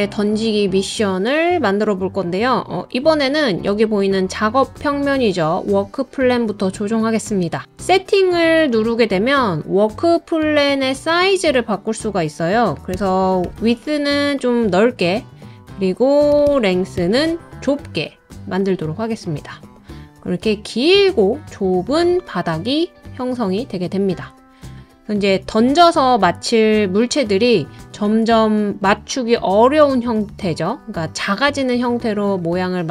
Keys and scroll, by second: 12.9-13.4 typing, 16.3 BackSpace, 16.5 BackSpace.